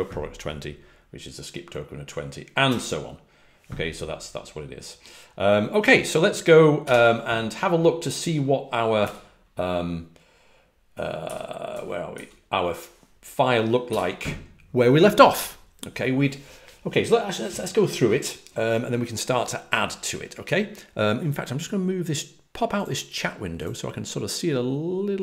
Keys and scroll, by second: 2.6 Return, 6.5-7.3 typing, 8.7-9.4 typing, 10.9-12.0 typing, 13.8 typing.